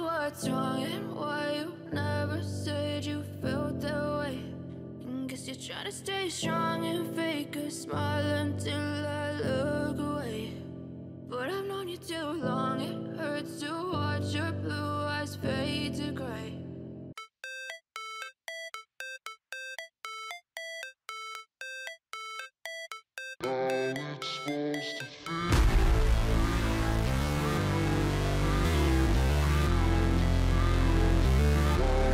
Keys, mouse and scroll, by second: 0.4 ctrl+a, 4.8 ctrl+d.